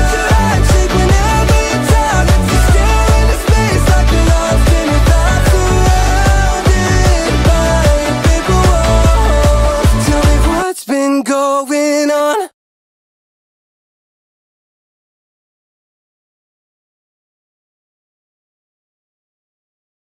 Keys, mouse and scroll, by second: 0.0 e, 0.5 middle click, 0.9 click, 1.9 middle click, 2.0 middle click, 2.2 shift+middle click, 2.6 click, 3.4 middle click, 4.0 click, 4.5 middle click, 4.7 shift+click, 5.1 e, 6.4 click, 6.7 middle click, 7.1 Tab, 7.2 shift+click, 7.9 shift+middle click, 8.3 shift+click, 8.5 shift+middle click, 9.2 shift+middle click, 9.5 middle click, 9.8 shift+middle click, 10.4-11.5 middle drag, 10.4 f, 13.1-14.5 shift+middle drag, 15.7-17.6 shift+middle drag, 18.2 shift+middle click, 19.8 shift+middle click.